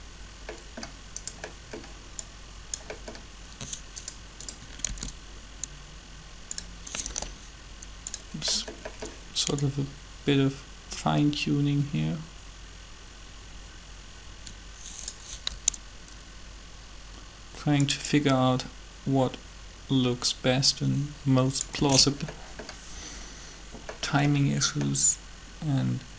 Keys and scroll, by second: 4.9 shift+d, 7.1 g, 15.4 g, 21.8 alt+a.